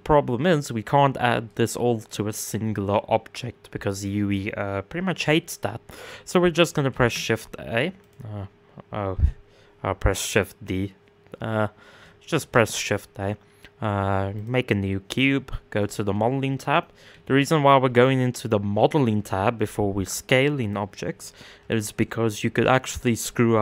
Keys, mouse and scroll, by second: 3.5 click, 6.5 shift+d, 14.0 shift+a, 15.4 click, 16.0-16.7 scroll down 3, 16.7 s, 21.1 KP_1, 22.3-23.1 scroll up 6.